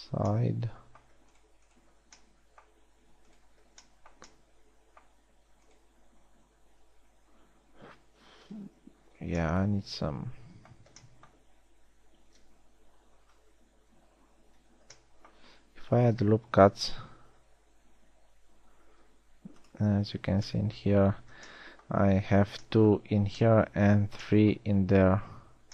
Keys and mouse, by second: 2.7 f, 14.6-15.8 middle drag, 17.6 ctrl+r.